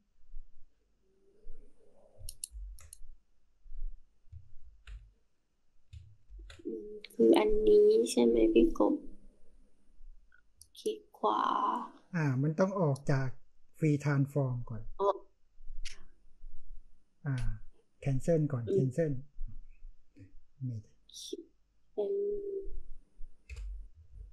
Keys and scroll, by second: 2.5 ctrl+c, 4.6 ctrl+v, 6.2 ctrl+t, 23.4 Return, 24.0 space.